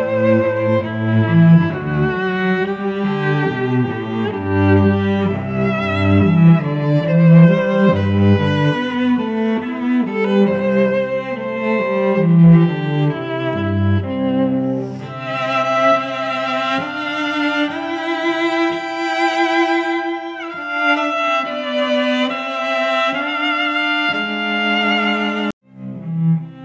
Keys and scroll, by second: 3.4 2, 3.8 3, 13.1 ctrl+z, 14.4 shift+Up, 15.9 space, 20.1 space, 20.7 a, 21.8 shift+a, 23.5 ctrl+z, 24.0 shift+a, 25.9 shift+Up.